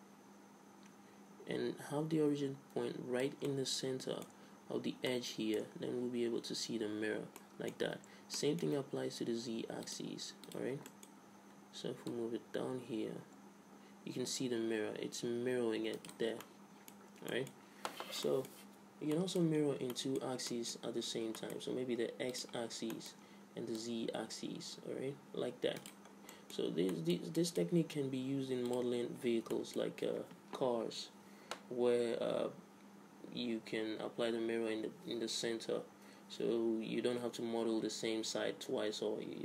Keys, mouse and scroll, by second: 3.5 middle click, 7.0 middle click, 8.0 ctrl+z, 10.0 click, 10.9-12.7 middle drag, 12.7-14.0 drag, 16.3-22.3 middle drag, 22.3-24.4 drag, 24.4 middle click, 24.9 click, 26.1-28.7 middle drag, 28.7-30.7 drag, 30.7 middle click.